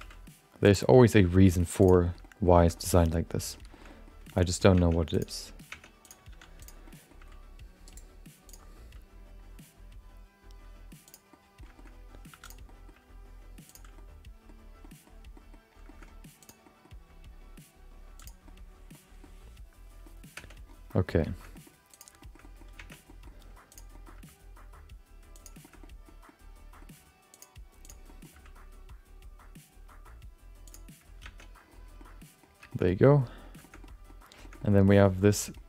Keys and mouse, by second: 0.6 g, 0.9 shift+middle click, 1.1 middle click, 1.8 click, 2.0 shift+middle click, 2.2 middle click, 2.6 shift+middle click, 2.7 middle click, 3.7 shift+middle click, 3.9 middle click, 4.3 shift+middle click, 4.4 middle click, 5.0 Tab, 5.1 click, 5.7 Tab, 6.0 click, 6.3 3, 6.6 click, 6.8 middle click, 7.2 g, 8.5 click, 8.8 g, 11.3 middle click, 11.7 shift+middle click, 12.3 2, 12.4 click, 12.6 middle click, 13.0 g, 13.9 middle click, 14.8 middle click, 15.3 middle click, 15.8 shift+middle click, 16.4 click, 16.6 middle click, 16.9 g, 18.4 middle click, 19.2 middle click, 20.6 Tab, 20.9 middle click, 21.5 middle click, 22.2 shift+middle click, 22.4 middle click, 22.8 Tab, 23.1 middle click, 23.7 click, 23.9 middle click, 24.2 g, 25.6 shift+middle click, 25.8 middle click, 26.2 middle click, 26.9 g, 27.8 click, 28.0 middle click, 28.3 g, 31.5 Tab, 32.0 middle click, 32.7 shift+middle click, 32.9 middle click, 33.6 shift+middle click, 33.8 middle click, 34.4 shift+middle click, 34.6 middle click, 35.2 middle click.